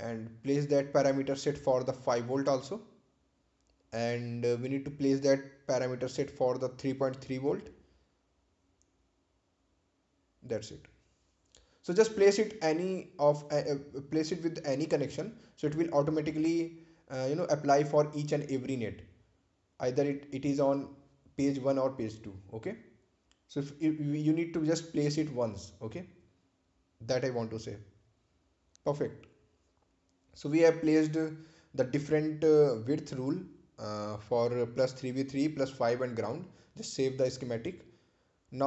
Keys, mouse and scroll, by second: 1.7 ctrl+c, 3.0 click, 4.0 ctrl+v, 4.9 space, 6.6 click, 8.1 scroll down 1, 10.5 scroll up 1, 12.9 ctrl+v, 15.7 space, 21.4-21.8 scroll down 1, 22.8 space, 25.2 click, 32.1 shift+click.